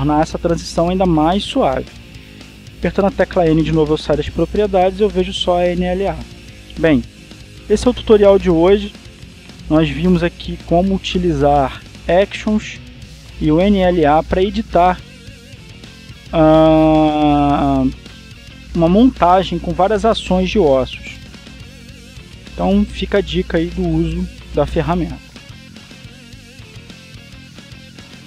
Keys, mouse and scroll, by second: 1.3-1.9 scroll down 1, 4.6 n, 5.7-6.3 scroll down 2, 6.5-7.6 shift+middle drag, 7.6 shift+click, 25.9 click.